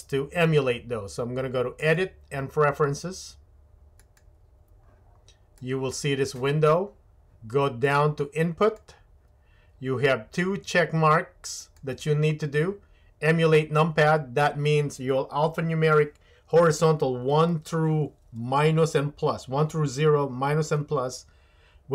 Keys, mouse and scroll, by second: 1.8-4.4 drag.